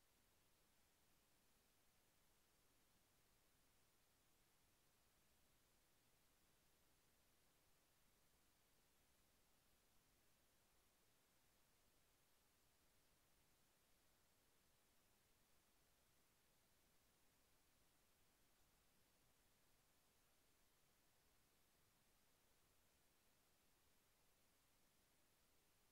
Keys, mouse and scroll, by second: 0.6 click, 2.2-10.5 drag, 17.8 click, 24.4 click.